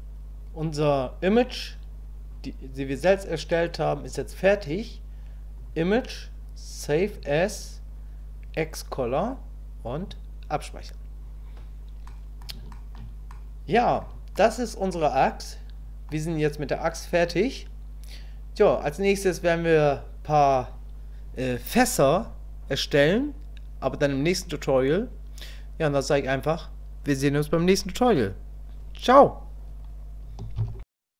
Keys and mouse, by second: 5.6-7.3 drag, 12.1 middle click, 12.7 shift+middle click, 13.3 middle click, 14.4-16.1 middle drag.